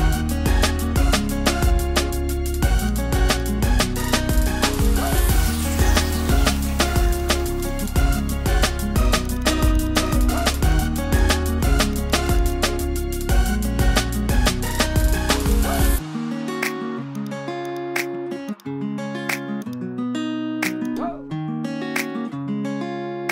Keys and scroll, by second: 13.4 super+0.